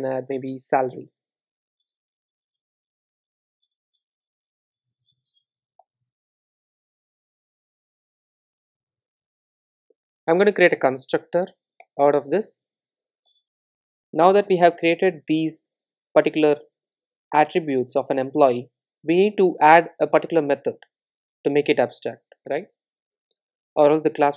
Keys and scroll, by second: 0.6 Return, 5.9 Return, 10.8 super+n, 13.4 super+z, 22.5 Return.